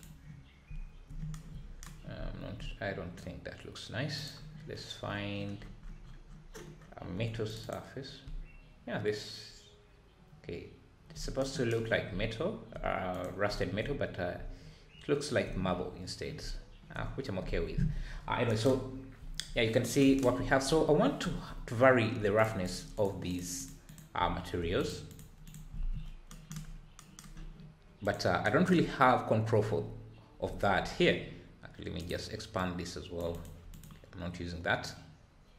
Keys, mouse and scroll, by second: 0.0 click, 4.4 click, 7.7-8.2 drag, 8.2 `, 12.1 `, 13.2 click, 17.0-17.4 scroll down 6, 18.1 scroll up 4, 18.9 scroll up 3, 19.2 `, 19.5-20.0 scroll down 5, 20.3 `, 20.8 scroll up 3, 21.2 `, 21.7-22.4 scroll down 2, 22.4 scroll down 1, 22.6 click, 22.9 click, 23.3 click, 23.6 click, 23.8 click, 24.2 `, 24.8 click, 25.1 click, 26.4 ctrl+s, 33.5-35.5 right drag.